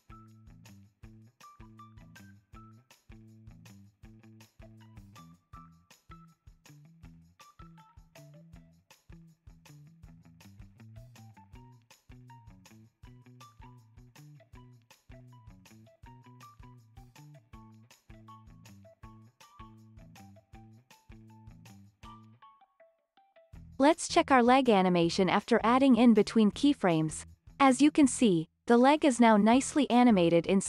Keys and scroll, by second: 0.0-0.4 typing, 3.8 alt+z, 4.0 alt+x, 4.7 alt+z, 5.5 alt+x, 5.9 alt+z, 6.1 alt+x, 6.2 alt+z, 8.0 super+Down, 8.7-12.2 typing, 9.7 alt+x, 10.0 alt+z, 10.1 alt+x, 10.3 super+Down, 10.5 super+Left, 12.3 alt+x, 12.6 alt+z, 12.7 alt+x, 13.1 alt+z, 13.3 alt+x, 13.5 alt+z, 13.6 alt+x, 13.7 alt+z, 13.9 alt+x, 14.7 alt+z, 14.9 alt+x, 15.5 super+Right, 16.1 super+Up, 16.2 super+Right, 16.5 super+Left, 16.7 alt+z, 16.8 alt+x, 17.0 alt+z, 17.2 super+Left, 17.6 alt+z, 17.8 alt+x, 18.7 super+Right, 19.5 alt+z, 19.7 alt+x, 20.4 alt+z, 20.6 alt+x, 20.7 super+Right, 21.1 alt+z, 21.2 alt+x, 22.0 alt+z, 22.1 super+Down, 23.4 super+Down, 23.7 alt+z, 23.9 super+Down, 24.1 super+Left, 24.2 super+Down, 24.5 alt+z, 24.7 alt+x, 24.8 alt+z, 25.0 super+Left, 25.1 super+Down, 25.3 alt+x, 25.6 alt+z, 27.7 space.